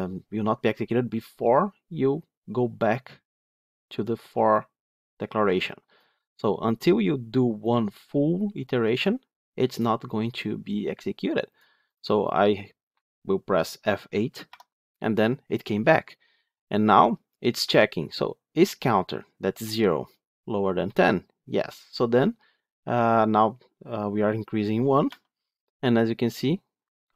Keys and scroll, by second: 14.4 F8, 25.0 F8.